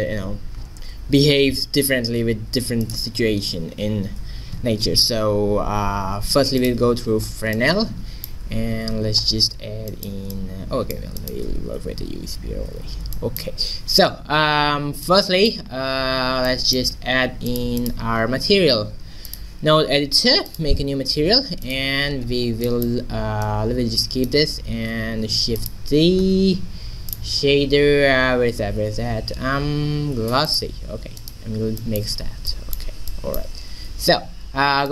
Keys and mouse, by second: 1.8 a, 2.0 a, 2.4 x, 4.9 shift+a, 7.2-8.3 middle drag, 8.5 q, 11.9 ctrl+2, 12.3 z, 16.7 click, 17.8-19.6 drag, 20.5-22.3 drag, 23.5-25.3 right drag, 25.0 shift+d, 26.2 shift+s, 31.2 right click, 31.8 middle click, 32.5 click, 33.1 middle click, 33.7 shift+a.